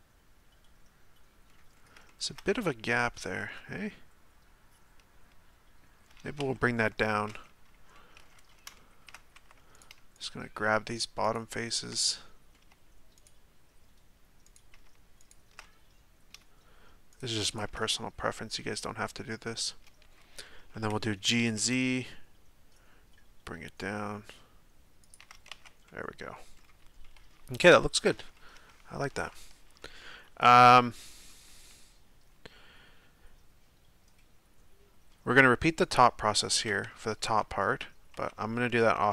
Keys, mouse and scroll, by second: 1.7-2.1 scroll up 3, 2.1-6.4 shift+middle drag, 6.4 Tab, 7.9-9.7 middle drag, 9.7 right click, 10.2 shift+right click, 11.2 shift+right click, 11.9-13.1 middle drag, 13.1 shift+right click, 14.4 shift+right click, 15.2 shift+right click, 15.6-17.1 middle drag, 17.1 shift+right click, 17.5 shift+right click, 17.8-21.3 middle drag, 21.3 g, 25.5 Tab, 25.9-26.3 middle drag, 26.3-27.0 scroll down 2, 27.0-34.3 middle drag, 35.8 right click, 37.2 Tab, 38.1 Tab.